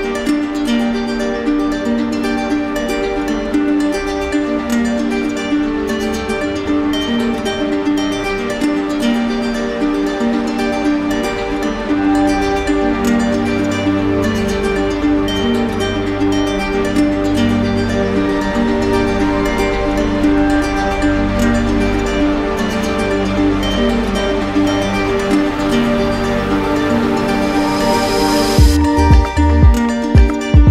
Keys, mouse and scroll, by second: 0.2 click, 1.3 click, 1.9 right click, 3.1 right click, 3.9 alt+right click, 4.5 right click, 6.3 click, 7.5 click, 8.4 right click, 8.9 shift+right click, 9.4 alt+right click, 10.4 alt+right click, 10.9 click, 11.5-12.6 right drag, 13.0 click, 13.6 right click, 14.2 alt+right click, 14.7 right click, 16.2 click, 17.4 click, 18.1 click, 19.2 click, 20.5 click, 21.8 click, 22.9 right click, 23.6 alt+right click, 26.1 right click, 27.3 click, 28.0 right click, 28.5 shift+right click, 29.2 alt+right click, 30.3 alt+right click.